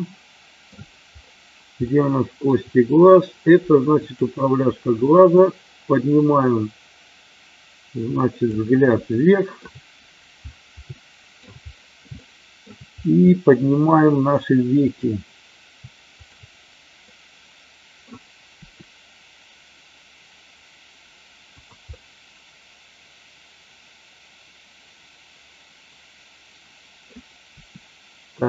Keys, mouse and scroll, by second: 1.8-2.5 shift+middle drag, 4.1 click, 5.5-8.5 drag, 9.1 scroll up 1, 9.3 shift+middle click, 11.0 scroll up 1, 11.1 shift+middle drag, 12.1-12.7 shift+middle drag, 12.1 scroll up 1, 13.2-13.9 middle drag, 13.2 scroll up 1, 13.8 scroll down 1, 14.7 click, 17.1-18.1 middle drag, 18.4 r, 21.4 click, 21.8-26.9 middle drag, 27.6 r.